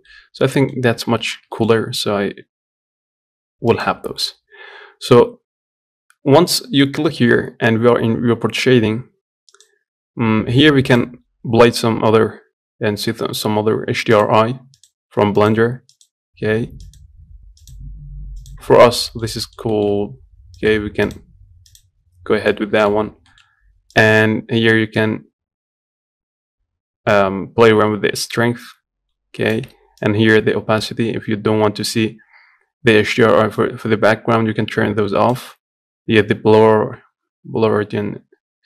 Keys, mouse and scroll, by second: 0.5 scroll up 1, 1.2-8.2 shift+middle drag, 8.2-14.0 drag, 18.5 scroll down 2, 18.8-21.5 shift+middle drag, 21.5 click, 22.2-24.8 middle drag, 24.8-30.8 drag.